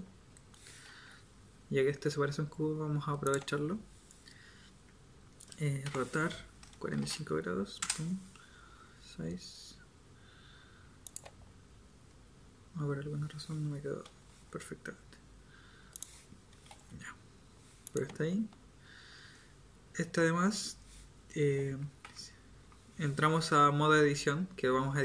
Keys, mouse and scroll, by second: 0.9 g, 5.8 r, 8.7 s, 14.3 r, 16.7 g, 18.2 z, 22.0 Tab.